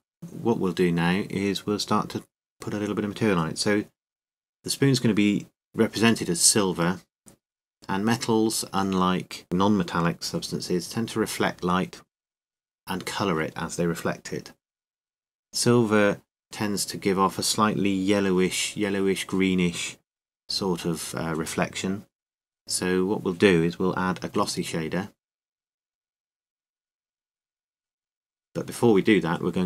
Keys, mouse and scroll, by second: 2.4 n, 2.8 t, 3.8 KP_5, 8.1-9.5 drag, 10.3 middle click, 11.0-12.9 drag, 13.6-15.7 middle drag, 17.2-21.0 drag, 21.0 KP_7, 22.1-24.0 middle drag, 25.9 Tab, 27.1 a, 27.6 a.